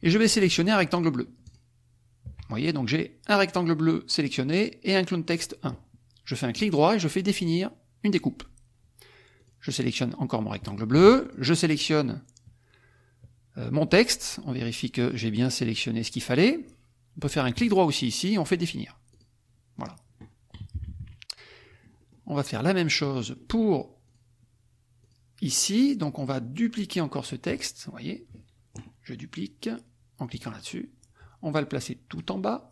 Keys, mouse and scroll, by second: 1.4 shift+click, 6.5 right click, 8.1 click, 9.3 click, 11.3 shift+click, 17.6 right click, 19.1 click, 19.7 click, 20.7 KP_Subtract, 21.6 click, 23.2 click, 24.0 click, 25.0 click, 30.3 click, 32.1 click.